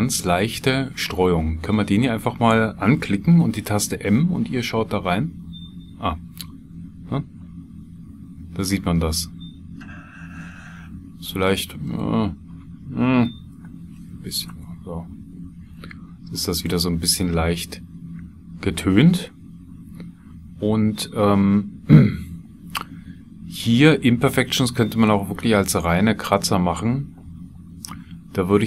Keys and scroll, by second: 5.2 m, 6.4-9.9 typing, 13.5 BackSpace, 13.8 KP_3, 14.5 KP_Enter.